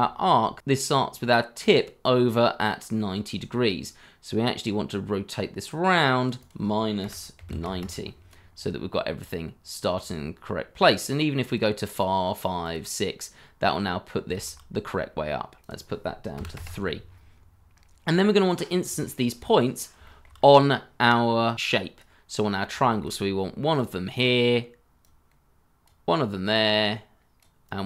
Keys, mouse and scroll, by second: 0.2 scroll up 1, 7.0 -, 7.3 9, 7.4 0, 7.6 Return, 8.4-9.0 scroll down 1, 9.0-10.2 scroll up 1, 11.8 double click, 13.3-14.2 scroll down 1, 14.2 scroll, 14.3 shift+z, 16.4 3, 16.5 Return, 17.7-18.5 scroll up 1, 18.5 scroll down 1, 19.0 shift+middle click, 20.0 shift+middle click, 20.3 scroll up 1, 22.3-22.7 scroll up 1, 22.8 shift+middle click.